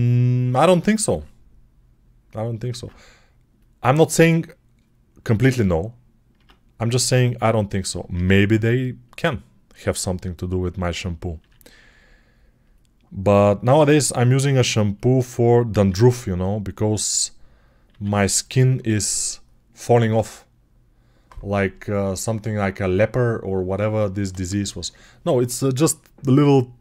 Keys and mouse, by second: 0.1-7.0 ctrl+alt+drag, 2.5 ctrl+Tab, 6.2 Tab, 7.0 middle click, 8.0 e, 9.6 e, 10.6-14.9 middle drag, 11.2 r, 13.5 x, 14.9 click, 15.7-26.8 middle drag, 15.7 e, 17.7 r.